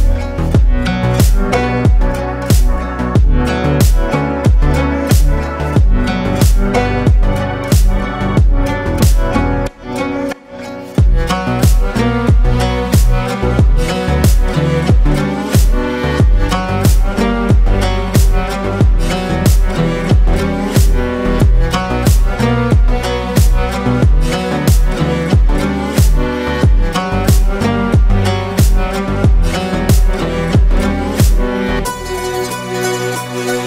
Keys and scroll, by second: 9.2 ctrl+space, 12.2 ctrl+space, 21.5 ctrl+space, 22.5 ctrl+alt+space, 25.0 ctrl+alt+space, 25.9 ctrl+alt+space, 26.6 ctrl+alt+space, 27.4 ctrl+alt+space, 28.2 ctrl+alt+space, 30.6 ctrl+alt+space, 31.1-32.5 typing.